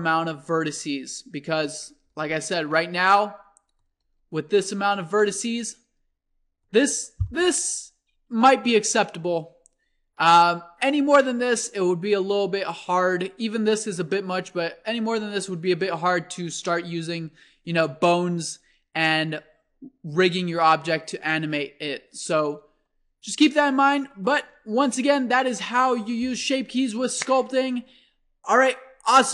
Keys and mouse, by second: 3.1 alt+a, 3.3 click, 3.8-5.9 drag, 4.6 Tab, 7.4-23.6 drag, 24.8 Tab.